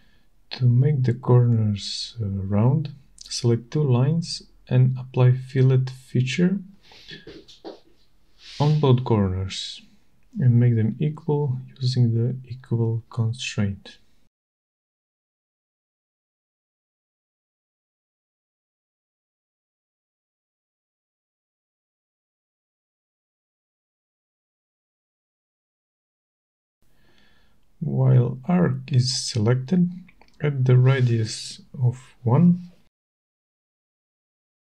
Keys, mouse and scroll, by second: 0.3 click, 2.2 click, 4.3 click, 5.3 click, 7.5 right click, 8.8 click, 10.2 click, 11.7 click, 14.7 click, 16.3 click, 17.5 click, 18.8 right click, 20.1 click, 21.7 click, 24.2 click, 26.2 click, 30.6 click, 32.2 click, 34.5 1.